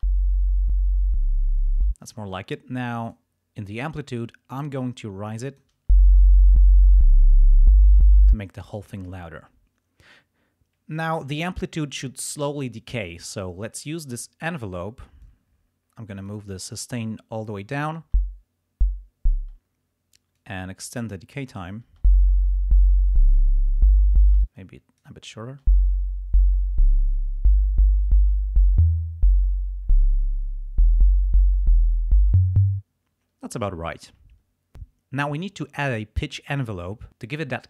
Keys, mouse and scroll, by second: 1.8 space, 3.0 click, 4.5-5.9 drag, 5.8 space, 8.2 space, 14.4 click, 15.2-16.4 drag, 18.1 space, 19.4 space, 20.3-21.8 drag, 21.9 space, 24.3 space, 24.4 click, 25.5 space, 32.7 space.